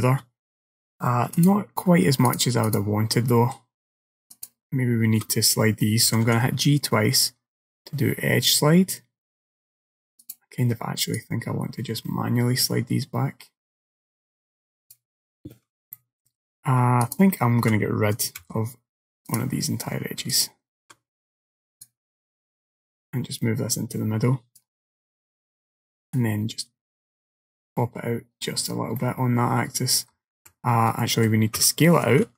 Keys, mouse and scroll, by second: 1.4 click, 2.3 click, 3.4 middle click, 4.4 alt+click, 6.1 g, 11.2 click, 16.0 middle click, 17.1 alt+click, 18.4 x, 20.4 alt+click, 21.9 click, 26.2 click, 29.0 middle click, 30.4 ctrl+z, 31.1 middle click, 31.6 s.